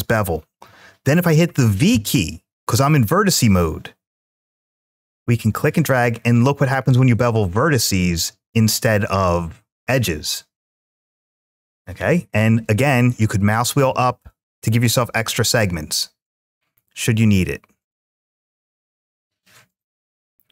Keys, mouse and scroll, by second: 1.7 v, 13.3 scroll up 1, 14.8 scroll up 1, 18.3-18.8 scroll down 2.